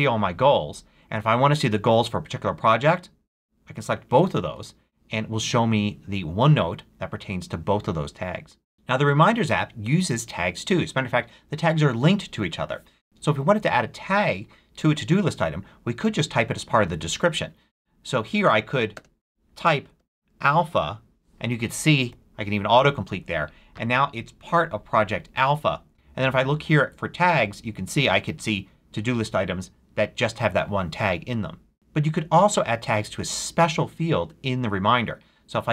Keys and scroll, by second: 18.9-21.2 typing, 22.1 Down, 22.8 Return.